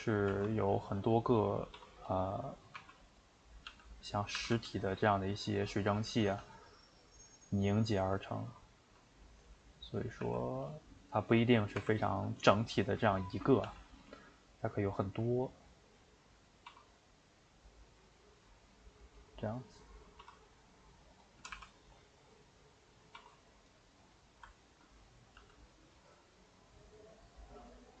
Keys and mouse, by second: 0.3 r, 1.7 s, 2.2 middle click, 2.8 r, 3.4 middle click, 3.7 g, 4.3 r, 5.9 middle click, 6.3 g, 7.1-8.8 middle drag, 8.8 g, 9.6 middle click, 10.2 r, 10.9 middle click, 12.3-13.6 middle drag, 13.6 g, 14.2-16.7 middle drag, 16.7 s, 19.3 middle click, 20.2 s, 21.4 r, 23.1 s, 23.9-25.4 middle drag, 25.4 g.